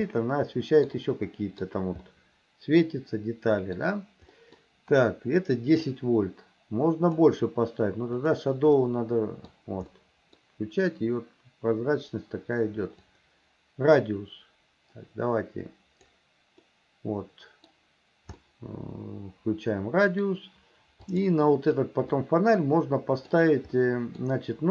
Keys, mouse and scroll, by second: 0.1 middle click, 1.0 middle click, 2.1-3.8 middle drag, 4.4 middle click, 5.9-7.2 drag, 8.2 click, 8.8 middle click, 10.0 middle click, 13.1-16.1 drag, 16.7-17.7 middle drag, 18.5-20.3 middle drag, 21.1 click, 22.2-23.4 middle drag, 23.8 middle click.